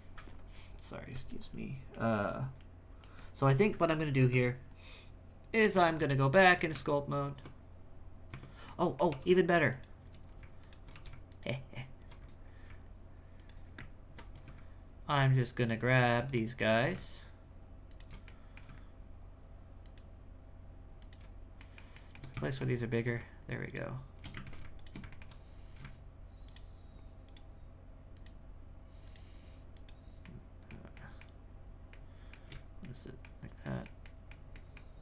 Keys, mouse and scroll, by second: 4.1 Tab, 5.7 Tab, 6.0 w, 6.7 Tab, 8.3 Tab, 8.6 middle click, 9.1 2, 9.7 alt+right click, 10.6 alt+right click, 10.9 2, 11.3 alt+right click, 12.2-13.3 scroll up 6, 13.3 alt+right click, 16.0 alt+shift+right click, 16.3-17.9 shift+middle drag, 17.9 alt+shift+right click, 18.2-19.8 middle drag, 19.8 alt+shift+right click, 21.0 alt+shift+right click, 21.6-22.8 shift+middle drag, 22.8-23.6 scroll up 2, 23.6 alt+shift+right click, 24.4 ctrl+z, 24.7 alt+shift+right click, 25.1 alt+middle click, 26.4 alt+shift+right click, 27.2 alt+shift+right click, 28.1 alt+shift+right click, 29.0 alt+shift+right click, 29.7 alt+shift+right click, 30.2 alt+shift+middle click, 30.9 alt+shift+middle click, 31.9 alt+shift+middle click, 32.8 alt+middle click, 33.6 alt+middle click, 34.0 alt+middle click.